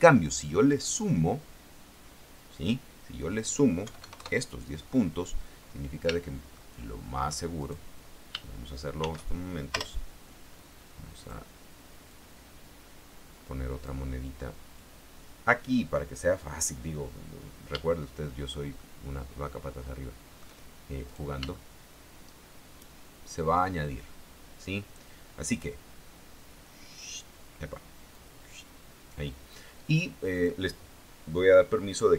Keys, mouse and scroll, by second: 4.0 KP_1, 4.2 KP_0, 4.3 KP_Enter, 6.4-7.5 shift+middle drag, 7.8 shift+right click, 9.2 shift+d, 10.0 Return, 10.7 click, 12.2-14.2 drag, 14.9-16.9 drag, 18.0 shift+middle click, 18.9-20.7 shift+middle drag, 21.2 right click, 21.7-23.9 shift+middle drag, 25.3 click, 26.8 click, 28.3 click, 30.5 click.